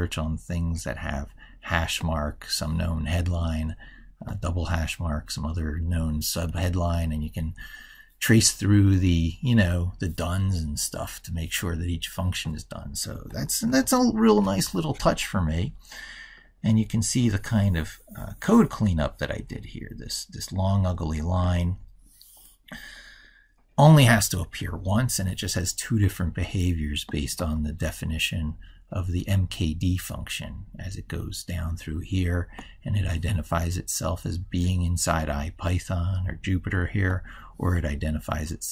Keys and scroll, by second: 13.5 ctrl+super+Left.